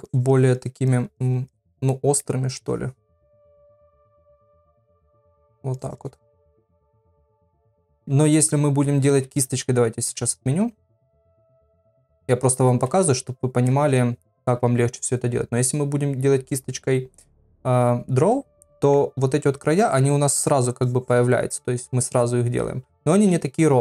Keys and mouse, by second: 0.1 click, 0.3 click, 0.6 click, 0.9 click, 1.2 click, 1.5 click, 1.9 middle click, 2.6 click, 3.6 click, 3.8 click, 4.3 click, 4.6 click, 4.9 click, 5.1 middle click, 5.7 click, 6.5 middle click, 7.3 ctrl+z, 7.5 ctrl+z, 8.2 ctrl+z, 9.3 ctrl+z, 9.5 ctrl+z, 9.9 ctrl+z, 11.0 ctrl+z, 11.3 ctrl+z, 11.5 ctrl+z, 12.1 ctrl+z, 12.3 ctrl+z, 12.5 ctrl+z, 12.7 ctrl+z, 12.9 ctrl+z, 13.7 middle click, 16.7 click, 18.7 middle click, 19.7 click, 20.0 click, 20.4 click, 20.8 click, 22.8 ctrl+z, 23.2 ctrl+z.